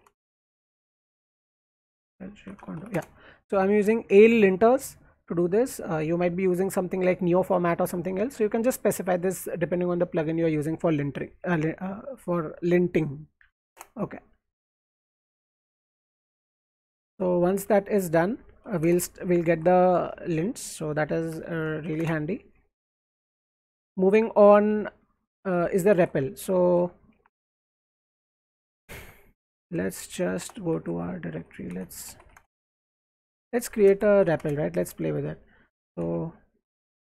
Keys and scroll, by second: 0.0-4.9 typing, 13.7 BackSpace, 15.7-19.2 typing, 19.3 alt+Right, 20.8-22.4 typing, 23.0 alt+Left, 23.7-24.6 typing, 25.1 alt+Right, 25.9 alt+Left, 26.6 alt+Right, 27.2 ctrl+a, 27.4 c, 28.8-35.2 typing, 35.8 alt+Left.